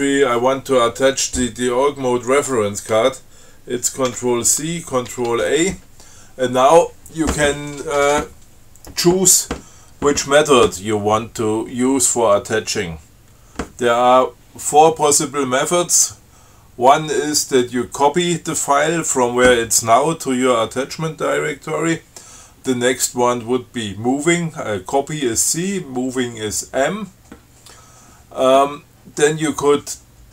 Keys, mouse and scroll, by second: 4.3 ctrl+c, 5.3 ctrl+a.